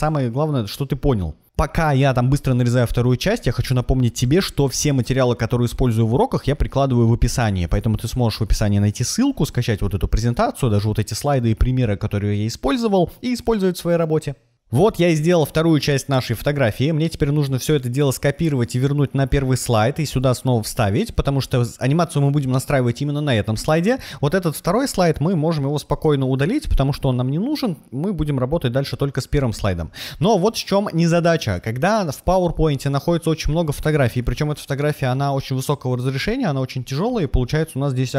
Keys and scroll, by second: 4.9 shift+super+1, 5.3-6.5 typing, 9.7 super+v, 12.8 super+z, 13.8 super+a, 16.0 super+a, 17.3 super+c, 21.0 super+v, 25.9 BackSpace.